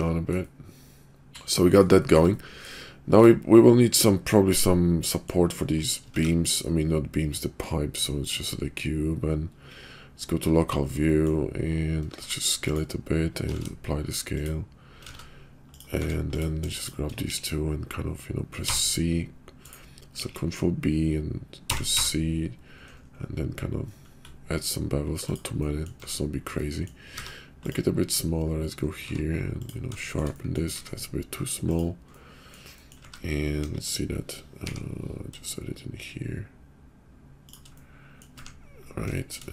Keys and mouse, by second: 0.4 middle click, 1.5 middle drag, 2.3 middle click, 3.1 click, 3.4-4.5 middle drag, 5.0 middle click, 5.7 click, 6.0 shift+a, 9.9 /, 11.0 drag, 12.1 s, 13.5 ctrl+a, 15.0 ctrl+a, 16.0 Tab, 16.7 shift+click, 17.3 ctrl+b, 20.1 ctrl+b, 25.6 middle click, 26.0 Tab, 26.5 middle click, 27.0 s, 27.9 /, 29.0 q, 30.1 shift+click, 30.3 click, 30.7 s, 32.1-32.5 drag, 32.8 right click, 33.0 `, 33.6 KP_5, 34.6 g, 37.7 middle click, 38.4 `, 39.2 shift+click.